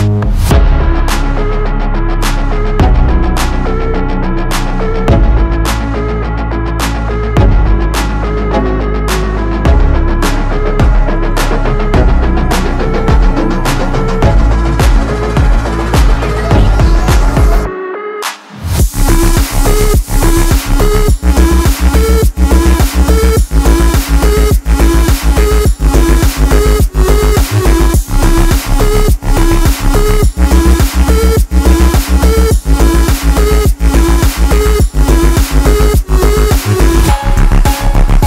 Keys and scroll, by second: 23.2-24.1 typing, 27.5 3, 30.8 7, 32.6 5, 34.2 4, 37.2 3.